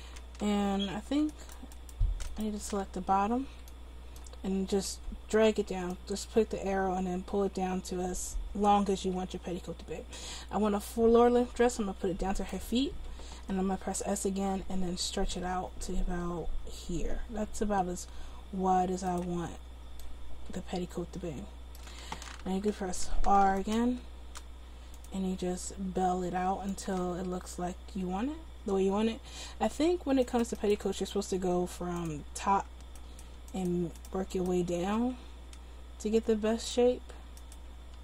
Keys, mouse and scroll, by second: 1.4-3.9 right drag, 3.9-12.6 drag, 13.9 s, 23.1 ctrl+r, 25.4 s, 30.3-36.0 right drag, 31.2 s, 35.0 s.